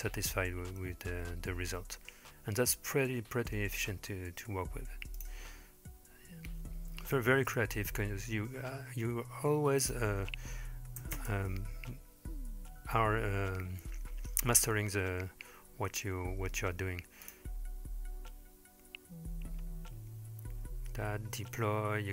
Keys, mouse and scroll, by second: 5.2 drag, 7.0-8.2 scroll down 2, 8.8-9.8 scroll down 1, 9.8-11.3 drag, 17.3 click.